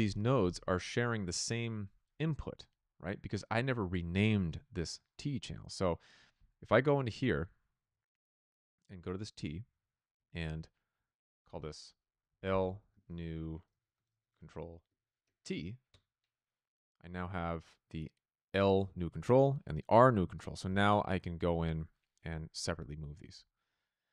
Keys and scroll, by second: 11.9-15.3 typing, 15.8 Return.